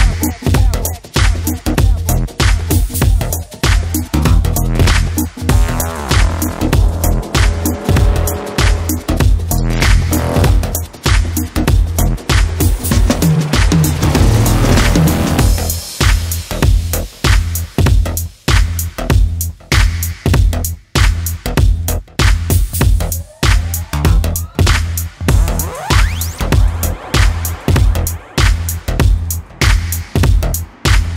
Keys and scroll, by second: 6.7 ctrl+t, 25.8 ctrl+j.